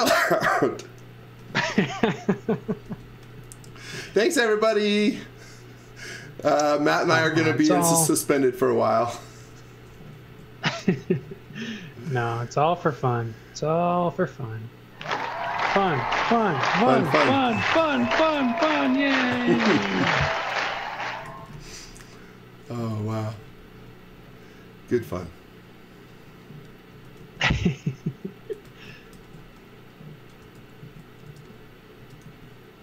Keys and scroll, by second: 0.0 c, 2.9 space, 3.7 s, 6.9-10.3 typing, 15.2-16.2 typing, 17.5 z, 17.8 x, 18.4 b, 21.3 x, 21.5 v, 22.6-24.1 typing, 26.9 space, 27.2 z, 28.7 x, 29.2 z, 30.4-32.8 typing.